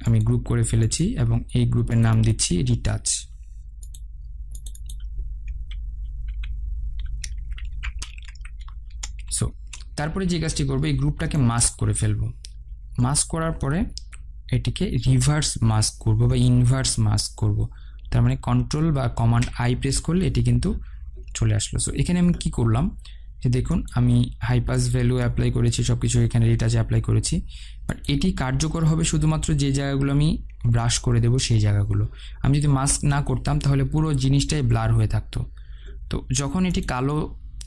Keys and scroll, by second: 9.4 Return, 18.8 ctrl+i.